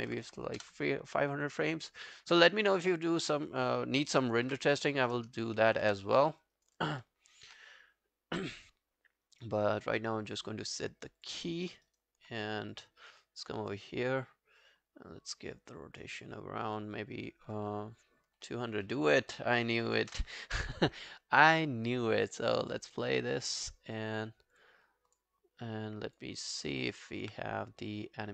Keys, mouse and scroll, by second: 0.0-0.9 typing, 2.1 alt+middle click, 2.3 alt+right click, 4.5 Up, 5.9 e, 6.3 alt+middle click, 6.6 alt+right click, 6.8 alt+click, 9.3 right click, 11.7 alt+middle click, 11.9 alt+right click, 19.4-20.4 typing, 26.7 alt+middle click, 26.9 alt+right click.